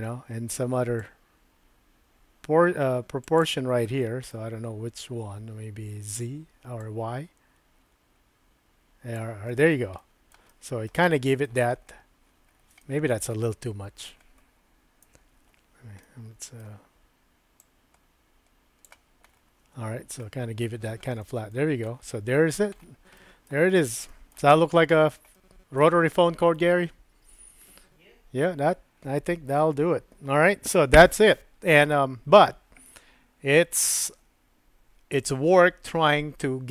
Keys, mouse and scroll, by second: 1.0-3.4 drag, 4.0 middle click, 6.8-9.2 drag, 9.5 shift+middle click, 10.0 shift+middle click, 11.0 middle click, 12.8 shift+middle click, 13.4 middle click, 15.0 KP_Decimal, 16.0 middle click, 16.6 scroll down 1, 17.6-18.9 drag, 20.2 middle click, 21.2 shift+middle click, 21.5-21.9 shift+scroll down 1, 21.9 shift+middle click, 22.1-22.5 shift+scroll down 1, 23.1 shift+middle click, 23.7 shift+middle click, 24.3 scroll down 1, 24.5 middle click, 25.0 scroll down 1, 25.3 shift+middle click, 26.1 shift+middle click, 26.5 scroll down 1, 29.6 middle click.